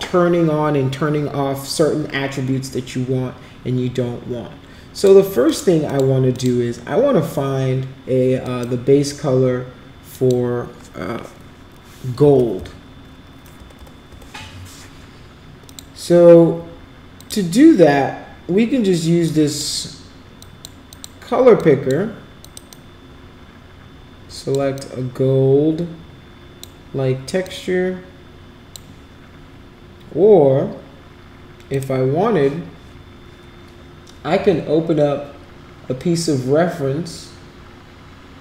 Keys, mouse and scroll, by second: 5.0 click, 5.5 click, 5.9 click, 6.3 click, 8.4 click, 10.1 click, 12.3 g, 14.1 BackSpace, 15.7 click, 17.2 click, 19.3 click, 20.4 click, 20.9 drag, 21.6 click, 22.5 click, 22.7-24.6 drag, 24.8-26.6 drag, 27.5 click, 31.7 click.